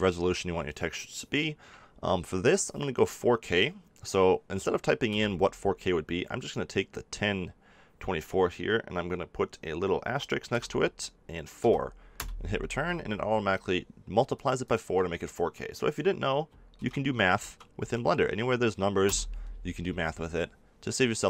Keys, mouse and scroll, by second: 14.6-16.4 drag.